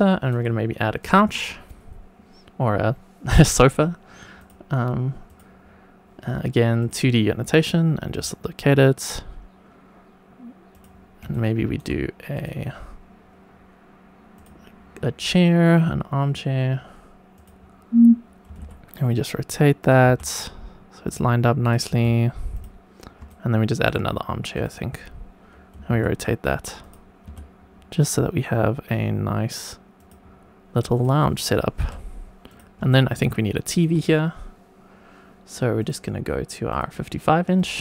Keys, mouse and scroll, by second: 1.0-4.5 drag, 5.2 click, 6.8 click, 8.0 g, 10.7 click, 11.3 shift+right click, 12.3-14.4 drag, 15.1 click, 17.3 click, 18.4 r, 18.6 z, 19.8 click, 20.0 g, 21.0 click, 21.6 click, 21.9 g, 22.5 click, 23.2 shift+right click, 24.5 click, 25.7 r, 25.9 z, 26.8 click, 27.2 g, 29.9 click, 30.9 click, 31.7 g, 32.4 click, 32.9 shift+right click, 35.7-36.7 drag, 37.5 click.